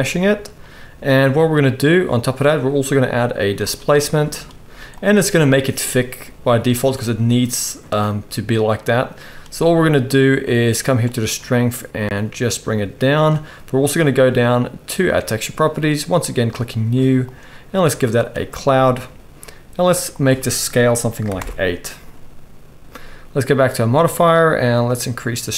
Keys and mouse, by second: 2.0-4.1 middle drag, 4.6 z, 10.6-15.1 shift+middle drag, 11.6-15.1 shift+drag, 11.6-25.0 shift+right drag, 16.4-23.8 drag, 16.4-23.8 middle drag, 24.8 click, 24.8-25.5 middle drag.